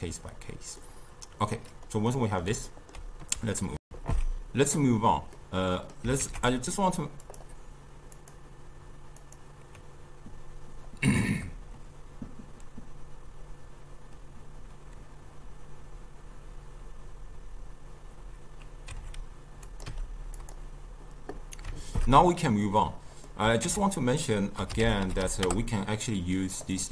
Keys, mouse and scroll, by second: 3.9 ctrl+alt+shift+q, 5.4 middle click, 6.3 ctrl+a, 8.2-17.9 drag, 20.0 n, 21.8 ctrl+shift+q, 22.8 middle click, 23.7 ctrl+a.